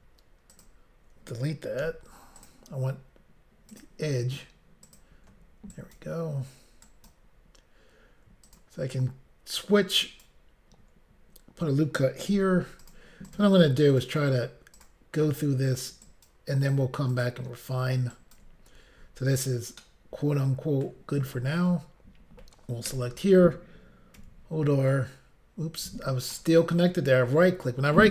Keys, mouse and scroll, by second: 0.5 shift+click, 0.6 shift+click, 1.8 x, 2.4 click, 2.5 click, 3.7 click, 3.9 click, 4.8 click, 5.0 click, 5.7 ctrl+right click, 6.8 ctrl+right click, 8.4 click, 8.5 click, 9.9 click, 10.0 ctrl+right click, 12.3 ctrl+r, 12.8 click, 13.3 click, 13.9 double click, 14.8 double click, 14.8 click, 16.0 ctrl+right click, 17.1 click, 18.1 ctrl+right click, 19.8 shift+middle click, 24.2 r, 26.3 right click.